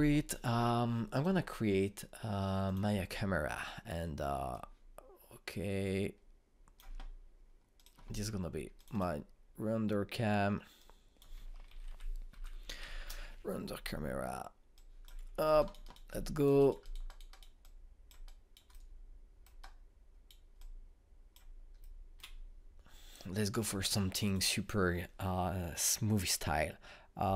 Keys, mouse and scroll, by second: 2.0-12.6 drag, 12.4-14.2 typing, 15.7 click, 16.5 alt+right click, 17.0 alt+click, 17.5 alt+right click, 18.5 alt+click, 19.2 alt+right click, 19.6 alt+middle click, 20.5 alt+right click, 21.5 alt+click, 22.7-24.3 alt+middle drag, 24.3 click.